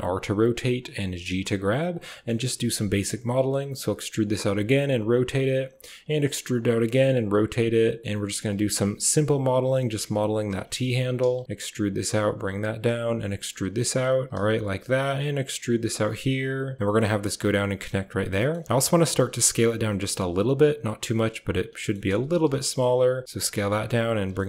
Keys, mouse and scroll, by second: 0.9 g, 1.9 shift+click, 2.5-4.8 typing, 6.1 e, 6.6 r, 7.0 g, 8.1 e, 8.4 r, 8.7 g, 9.6 shift+click, 10.1 r, 11.1-12.0 typing, 13.1-16.1 typing, 16.8 shift+click, 18.3 shift+click, 18.6 s, 19.3 r, 19.7 g, 20.1 s, 21.7 shift+click, 22.0-24.4 typing.